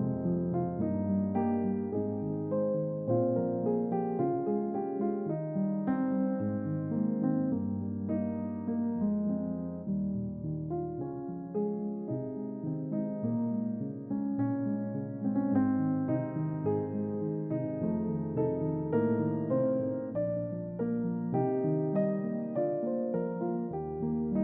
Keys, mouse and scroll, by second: 0.4-4.7 drag, 5.5-9.5 drag, 9.9 click, 11.8 click, 14.7-15.5 middle drag, 17.8 click, 20.4-21.2 scroll down 1, 21.2 click, 22.7-23.3 scroll down 1, 24.0-24.3 scroll down 1, 24.3 shift+click.